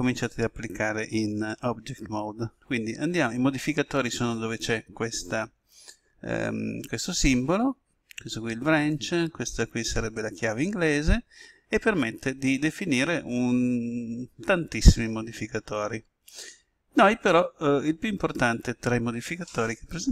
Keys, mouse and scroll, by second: 10.7 click.